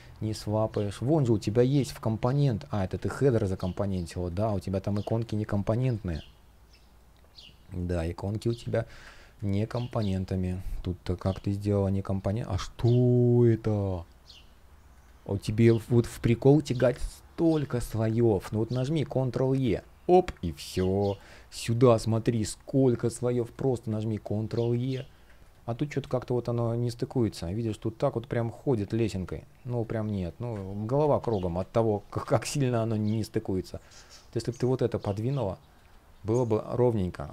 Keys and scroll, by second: 2.6 super+z, 3.1 space, 5.6 super+\, 8.3 super+\, 9.1 space, 10.9 super+\, 19.3 super+e, 24.0 super+e, 25.4 space, 25.8 shift+p, 30.3 super+z.